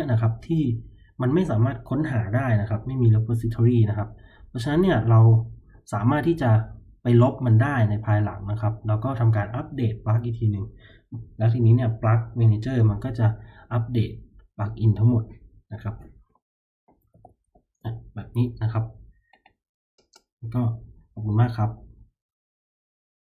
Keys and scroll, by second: 16.8-17.9 typing, 22.6 typing.